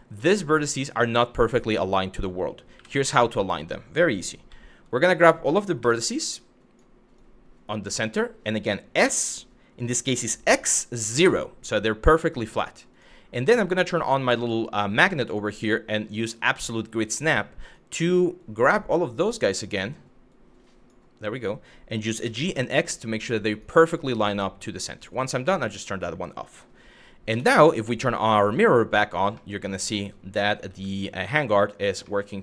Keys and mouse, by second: 2.4 1, 2.7 Tab, 4.1 z, 5.4 1, 6.1 click, 6.9 click, 8.6 s, 10.2 x, 10.8 KP_0, 12.5 click, 13.6 click, 15.0-17.2 drag, 17.3 click, 18.0-19.3 drag, 19.9 click, 21.8 g, 22.2 x, 23.1 click, 24.6 click, 26.9 Tab, 28.0 click, 29.1-30.1 middle drag, 30.4 z, 31.7-32.4 middle drag.